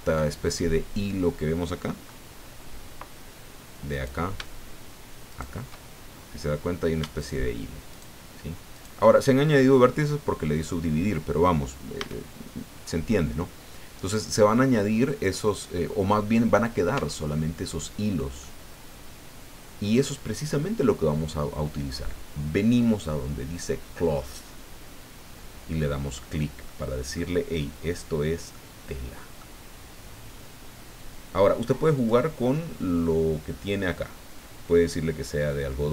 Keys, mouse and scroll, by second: 3.9 right click, 5.3 shift+right click, 7.1 shift+right click, 7.9 shift+right click, 8.7 shift+right click, 11.9 a, 14.5-16.2 middle drag, 16.9 Tab, 18.4-20.1 middle drag, 26.6 middle click, 28.5-29.6 middle drag, 30.0-30.5 scroll down 2, 31.0-31.3 scroll up 2, 31.9 click.